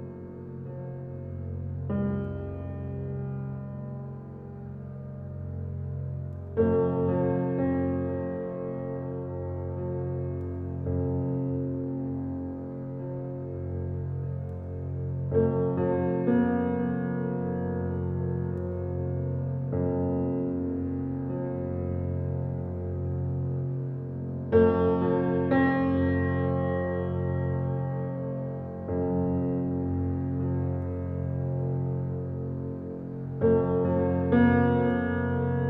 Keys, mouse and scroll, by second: 2.5 click, 3.0-3.7 scroll down 1, 3.7-4.7 scroll up 1, 4.7 scroll down 1, 5.0-5.4 scroll up 1, 16.8-17.4 typing, 19.1 Return, 20.8 click, 23.0-23.3 scroll down 1, 27.0-27.6 scroll up 1, 27.7 click, 28.9-29.8 typing, 31.5 click, 33.2 scroll down 1, 34.1-35.6 scroll up 1.